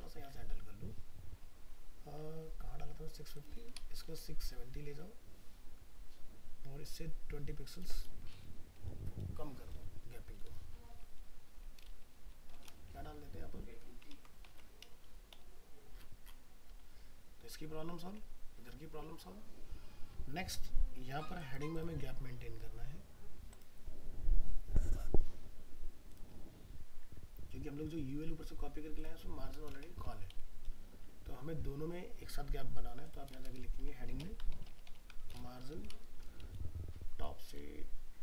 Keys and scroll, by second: 14.1 ctrl+s, 14.5 alt+Tab.